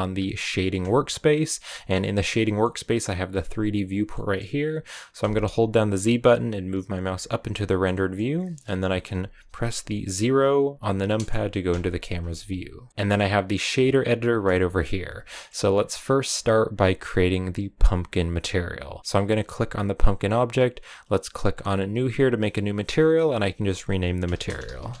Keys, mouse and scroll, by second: 0.7 click, 2.4-7.1 middle drag, 7.1 z, 7.8-11.0 middle drag, 11.0 KP_0, 12.9-14.5 drag, 14.5 shift+middle click, 14.7 scroll up 1, 15.2-18.7 shift+middle drag, 18.7-21.8 right drag, 21.8-25.0 drag.